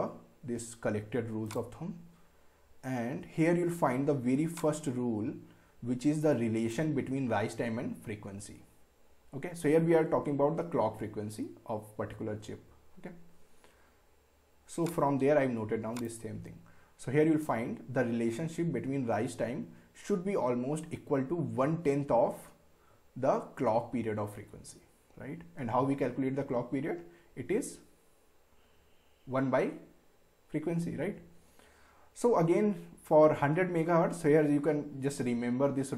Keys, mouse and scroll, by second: 1.5 click, 2.2 scroll down 1, 4.6-10.2 drag, 14.8 click.